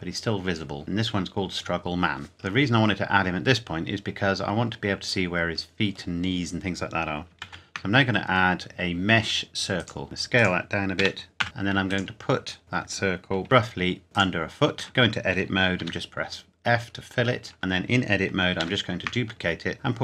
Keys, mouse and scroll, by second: 0.8 click, 2.3-2.6 scroll up 1, 2.6 middle click, 7.4 shift+a, 9.7 click, 10.0 s, 10.4 click, 10.9 g, 11.4 z, 11.8 click, 12.6 KP_Decimal, 13.4-13.8 scroll down 1, 14.0 g, 14.2 click, 14.8 Tab, 15.8 f, 17.5 Tab, 18.6 shift+d.